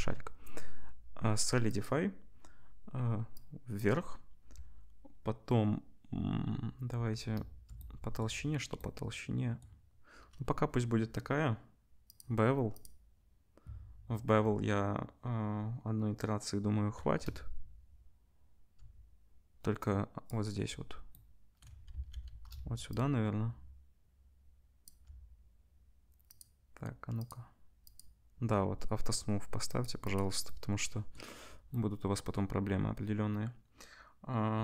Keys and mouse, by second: 8.7-12.1 middle drag, 12.1-20.3 drag, 20.3-22.9 middle drag, 21.9 ctrl+s, 22.9-26.4 shift+drag, 26.4-27.2 middle drag, 27.2-27.9 drag, 27.9-29.6 middle drag, 29.6 click, 30.2-34.6 middle drag.